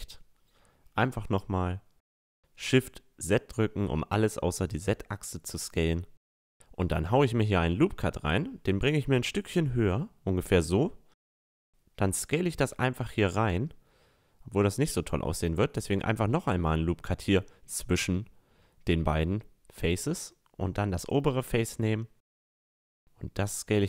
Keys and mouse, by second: 0.9 s, 4.9-6.5 drag, 5.7 middle click, 6.0 Tab, 6.7 middle click, 6.9 ctrl+r, 10.3 s, 15.3 ctrl+r, 17.4 a, 18.3 middle click, 19.8-21.5 drag, 20.6-22.3 right drag, 21.0 s, 23.7 s.